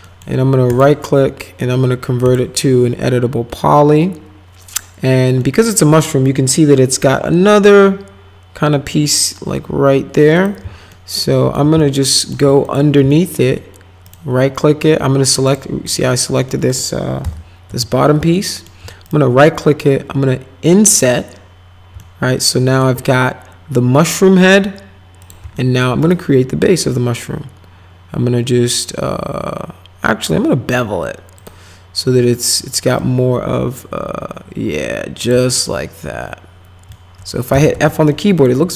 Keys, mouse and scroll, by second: 0.0 right click, 0.7 right click, 2.2 click, 5.4 middle click, 10.3 click, 10.9 alt+middle click, 11.8 alt+right click, 12.6 click, 13.1 alt+right click, 14.0 right click, 15.5 click, 15.9 click, 16.5 middle click, 17.2 p, 17.7 z, 18.3 alt+middle click, 19.1 right click, 20.9 click, 22.0 alt+middle click, 25.2 click, 25.6 alt+middle click, 26.0 right click, 31.4 click, 33.0-35.3 drag, 35.6-36.9 alt+middle drag, 37.3-38.2 typing, 38.1 middle click.